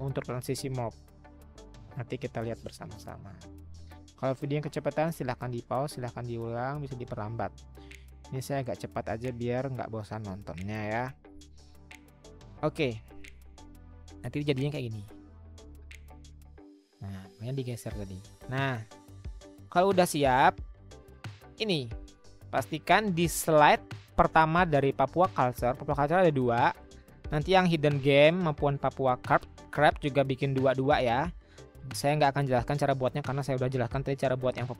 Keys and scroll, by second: 3.7 Up, 3.7 Left, 4.2-11.6 Left.